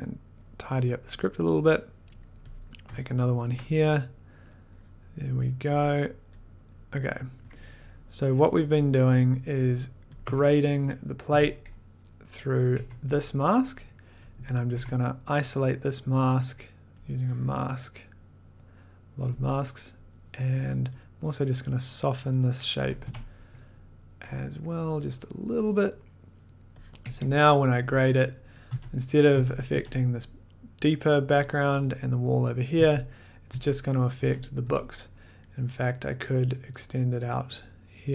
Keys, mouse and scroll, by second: 0.3 click, 1.6 middle click, 2.1 middle click, 2.6 click, 2.6 middle click, 3.0 scroll, 3.4 ctrl+click, 3.8-4.3 scroll, 5.4 click, 5.8 middle click, 6.7 click, 7.3 click, 10.1 click, 10.2 1, 11.3 a, 12.6 click, 12.7 1, 14.2 click, 14.7 1, 15.6 click, 15.7 click, 19.3 click, 22.0 click, 22.6 click, 23.0 b, 25.4 click, 26.0 middle click, 26.9 click, 27.0 1, 28.6 click, 28.7 d, 29.3 d, 29.7 d, 32.7-34.6 typing, 35.6-38.1 scroll.